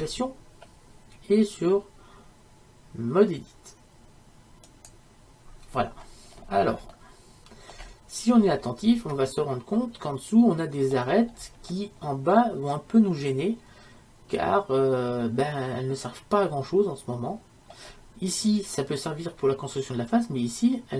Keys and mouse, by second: 0.0 Tab, 7.7-20.9 middle drag.